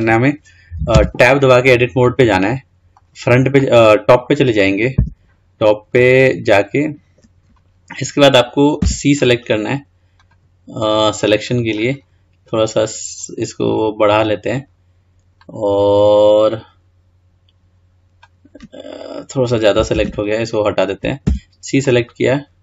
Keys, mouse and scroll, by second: 0.3-0.9 scroll up 1, 1.1 Tab, 2.2-5.2 middle drag, 5.2 `, 20.1 ctrl+z, 21.4 c.